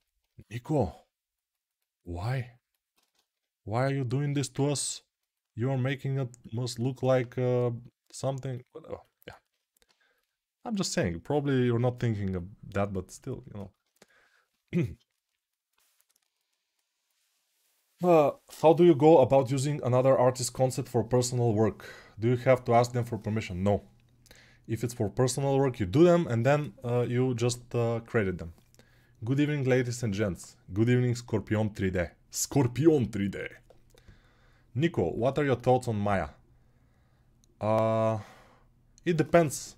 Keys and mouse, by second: 9.6 6.